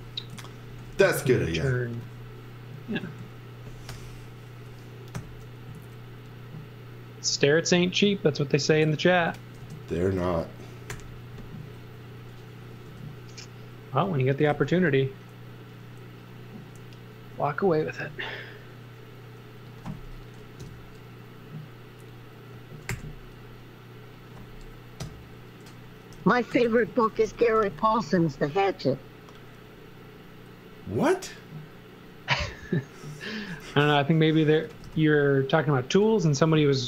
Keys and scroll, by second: 0.0-1.4 typing, 3.0 z, 3.9 i, 5.2 Right, 5.7 Left, 6.7 Left, 9.6 space, 10.9 j, 12.9 space, 14.1-15.0 typing, 17.8 space, 20.6 BackSpace, 22.9 g, 25.0 BackSpace, 26.0-27.9 typing, 34.4-35.3 typing.